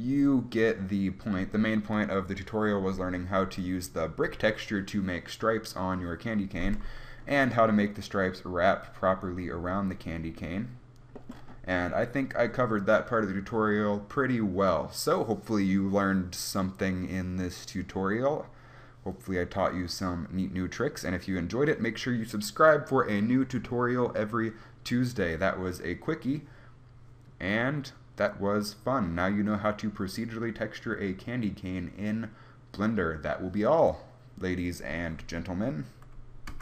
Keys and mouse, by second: 7.3 middle click, 8.2-11.7 middle drag, 13.2-18.5 middle drag.